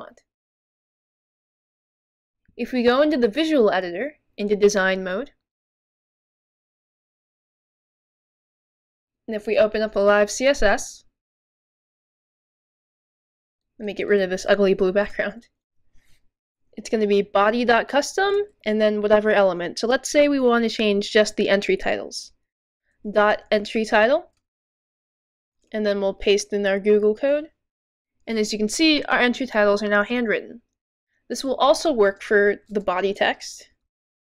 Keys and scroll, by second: 17.1-18.6 typing, 20.1 typing, 23.2-26.0 typing, 27.1 typing, 28.2 typing, 33.0-34.2 typing.